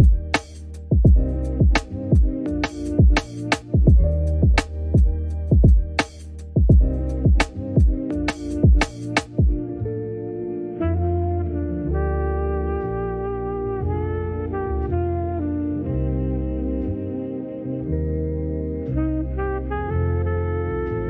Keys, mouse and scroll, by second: 0.6 click, 0.7 alt+click, 0.8 middle click, 2.2 shift+middle click, 2.7 KP_3, 3.0 click, 3.4 alt+click, 3.7 alt+shift+click, 4.0 middle click, 4.7 click, 5.5 ctrl+r, 6.5 click, 6.7 click, 6.8 alt+click, 7.0 click, 7.1 alt+click, 7.3 alt+shift+click, 7.4 scroll down 2, 7.5 middle click, 7.6 right click, 8.0 shift+d, 8.2-9.6 right drag, 9.7 scroll up 1, 9.8 Tab, 9.9 shift+middle click, 10.0 click, 10.4 click, 10.6 click, 11.3 click, 11.5 click, 12.3 shift+middle click, 12.8 click, 13.2 shift+middle click, 13.6 click, 13.7 middle click, 14.0 scroll down 1, 14.1 middle click, 15.3 middle click, 15.7 click, 15.9-17.5 drag, 18.5 click, 20.7 click, 20.8-21.0 drag.